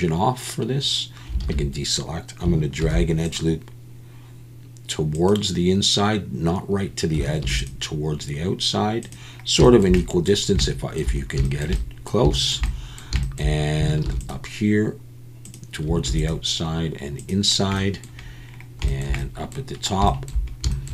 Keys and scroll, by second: 1.4 alt+a, 2.8 ctrl+r, 7.4 ctrl+r, 14.0 ctrl+r, 16.1 ctrl+r.